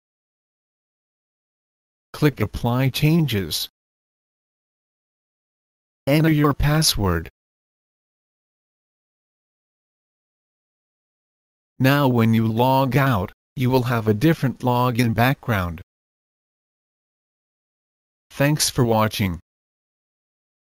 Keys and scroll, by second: 8.5 Return.